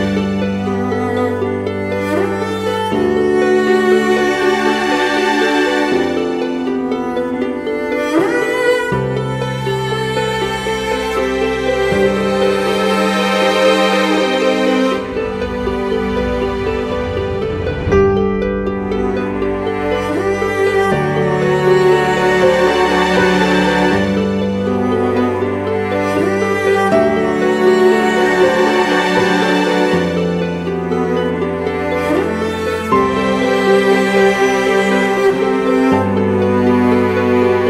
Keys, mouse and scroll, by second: 27.0 alt+click, 33.9 right click, 35.5 ], 36.0 ].